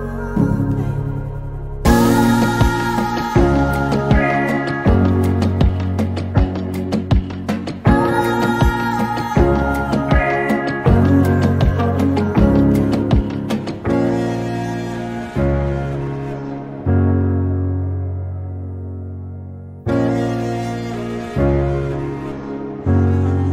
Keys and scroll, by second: 3.2 m, 4.3-6.8 typing, 12.3 m, 15.2 /, 17.4-18.7 typing, 19.8 6, 21.5 Return.